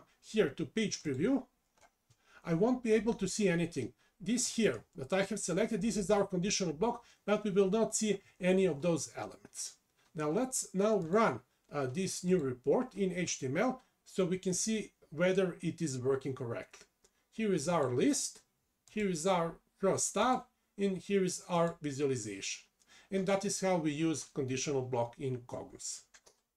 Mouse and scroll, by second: 15.3 click.